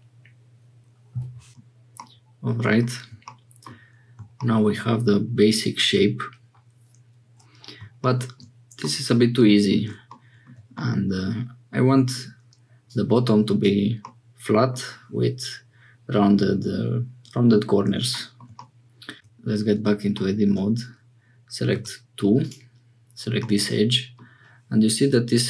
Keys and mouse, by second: 1.5 shift+middle click, 1.9 middle click, 8.9 click, 10.8-12.3 drag, 12.9 click, 14.0 click, 18.5 click, 19.1 Tab, 21.7 2, 23.4 click.